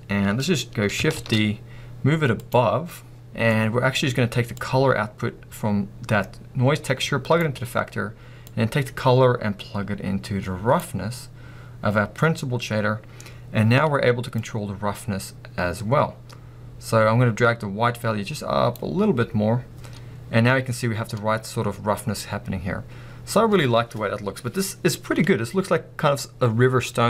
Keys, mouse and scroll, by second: 1.2-2.5 middle drag, 1.2 shift+d, 2.5 click, 3.2 scroll down 1, 3.2-4.5 middle drag, 4.5-7.4 drag, 8.6 click, 11.1 scroll up 1, 14.4-27.0 drag.